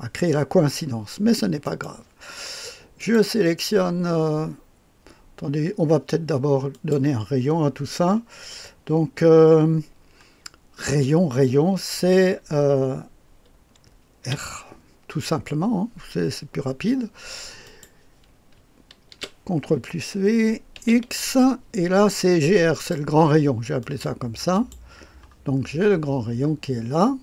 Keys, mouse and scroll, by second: 1.6 right click, 2.9 click, 6.7 click, 14.2 r, 17.6 click, 19.1 ctrl+v, 20.7 x, 22.7 click, 23.8-25.2 drag, 25.5-27.2 scroll down 1.